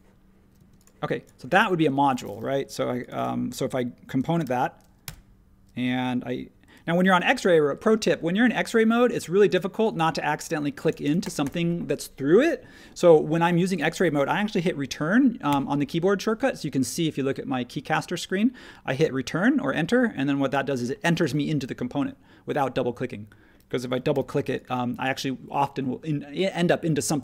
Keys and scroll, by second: 0.6 space, 4.4 shift+g, 5.0 Return, 15.5 Return, 24.1 p.